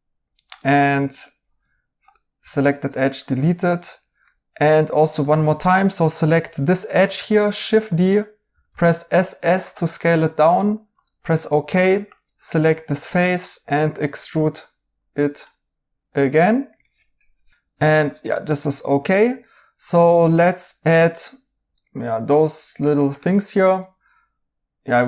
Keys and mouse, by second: 1.6 2, 2.3 2, 4.2 right click, 7.0 d, 8.4 typing, 11.2 right click, 11.7 3, 16.4 right click, 18.5 right click, 21.7 right click.